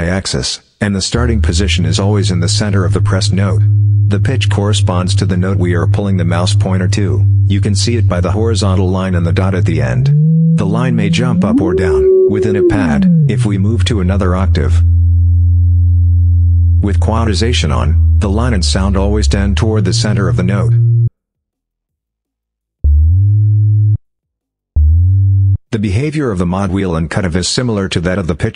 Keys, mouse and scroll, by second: 0.0 click, 0.9-21.0 drag, 21.6 click, 22.6-23.9 drag, 24.5-25.5 drag, 26.3 click.